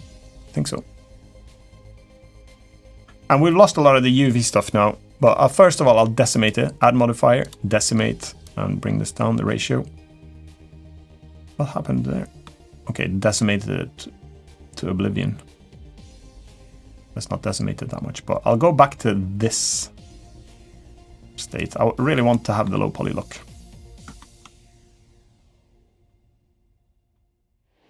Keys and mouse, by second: 0.1 click, 2.3 click, 6.1-7.3 drag, 8.2-11.0 drag, 11.2-12.2 middle drag, 13.1-21.5 drag, 22.1-22.4 middle drag, 23.5 middle drag, 23.9 shift+middle drag, 25.4-25.8 middle drag, 26.2 middle click.